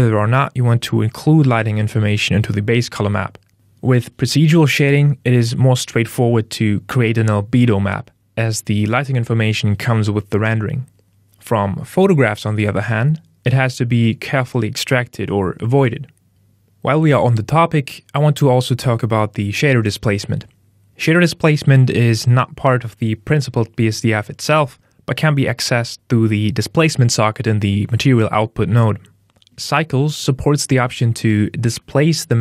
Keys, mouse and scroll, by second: 3.5 n, 7.8 ctrl+shift+click, 20.4 middle click, 21.1 ctrl+middle click, 21.8 middle click, 22.8 click, 30.7 middle click, 32.1 click.